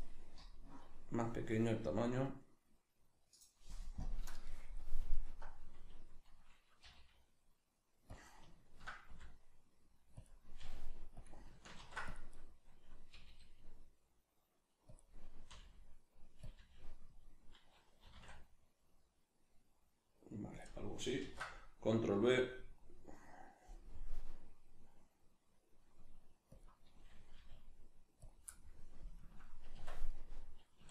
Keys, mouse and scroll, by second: 3.4 click, 5.1 alt+right click, 6.9 g, 8.2 click, 9.1 r, 10.3 click, 10.6 g, 11.3 click, 11.8 ctrl+r, 12.5 right click, 13.1 g, 15.0 click, 15.5 r, 16.5 click, 16.6 g, 17.2 click, 18.0 r, 20.6 click, 21.2 ctrl+b, 26.7 click, 27.4 g, 28.3 click, 28.5-30.9 middle drag, 29.8 Tab, 30.8 a.